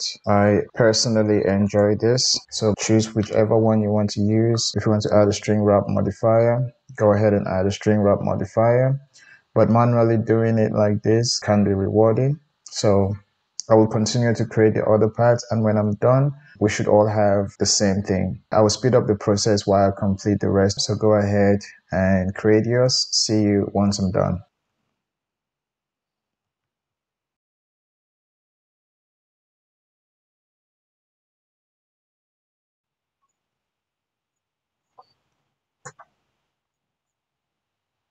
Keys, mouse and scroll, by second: 1.6 click, 1.7-4.7 middle drag, 4.7-18.5 drag, 18.5 Tab, 18.5-21.0 middle drag, 24.5 click, 24.6 Tab, 25.6-26.0 middle drag, 26.6 alt+z, 27.4 c, 27.9 3, 28.3 c, 30.7 shift+click, 32.9 shift+d, 33.5 p, 34.8-36.7 drag, 36.8 Tab, 37.0 click, 37.6 Tab, 38.0-38.1 middle drag.